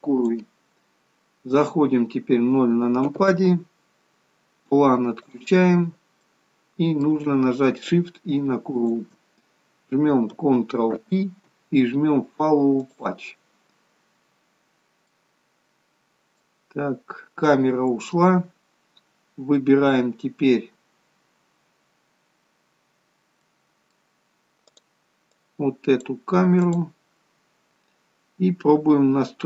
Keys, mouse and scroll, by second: 3.1 KP_0, 5.4 click, 5.9-6.3 scroll down 3, 6.3 middle click, 8.8 shift+click, 11.0 ctrl+p, 14.8-16.8 scroll up 2, 15.2 middle click, 16.8-17.9 scroll down 2, 22.8-24.2 scroll down 3, 23.5 middle click, 24.8 click, 25.4 click, 26.7 click.